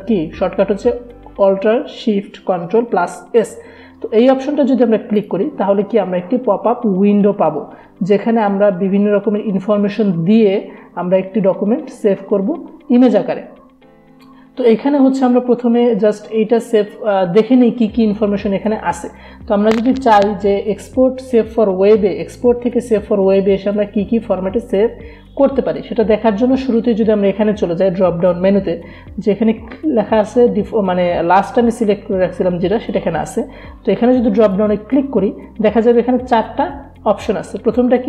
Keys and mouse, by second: 5.2 click, 34.4 click, 34.5 click.